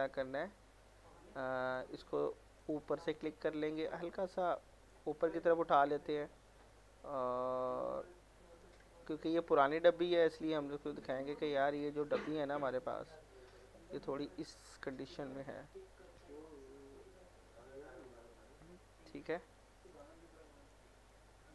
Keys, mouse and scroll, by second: 1.7 click, 3.0 middle click, 3.2-3.7 scroll up 1, 3.7-5.1 drag, 5.1 alt+middle click, 5.5 scroll up 1, 6.4-11.4 drag, 11.4 alt+middle click, 13.0 click, 14.8 click, 15.8 r, 16.8-18.2 drag, 18.2-19.9 alt+middle drag, 19.9 click, 20.3 scroll down 1, 20.5 alt+middle click, 21.0 scroll up 1, 21.1 middle click.